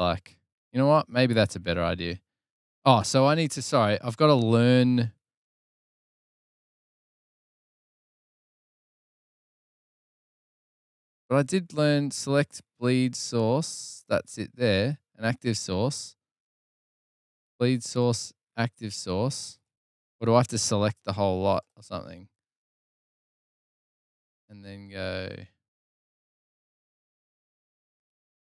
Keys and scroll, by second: 26.8 super+-, 27.0 super+-.